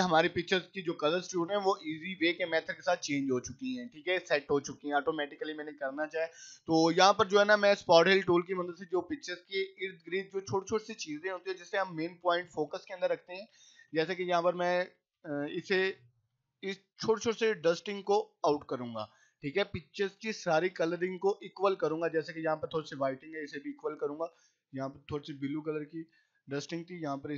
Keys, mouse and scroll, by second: 3.9 click, 4.6 right click, 4.9 click, 7.4 scroll down 1, 8.4 click, 12.0-14.9 typing, 15.5 click, 16.2 [, 16.9 click, 17.5 [, 18.0 click, 20.7 [, 21.0 click, 22.5-23.0 drag, 23.7 [, 24.3 click, 25.0 ], 25.3 ], 25.5 scroll up 1, 26.8 ].